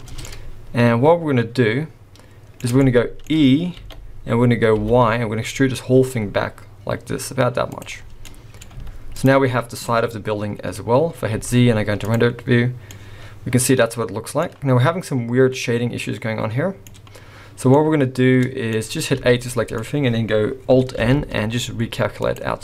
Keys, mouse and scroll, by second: 0.3 middle click, 2.8 shift+middle click, 3.8 e, 8.0 scroll down 2, 8.3 middle click, 8.7 z, 9.9 middle click, 11.0 scroll up 1, 11.3 z, 12.9 middle click, 15.1 middle click, 17.7 middle click, 19.1 a, 19.5 middle click, 21.0 alt+n.